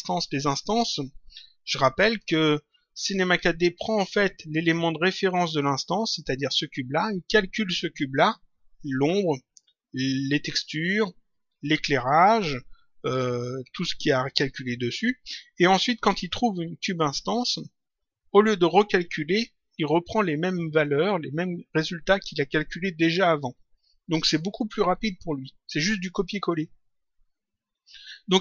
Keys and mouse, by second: 0.5 click, 3.9 click, 6.4 click, 16.1 click.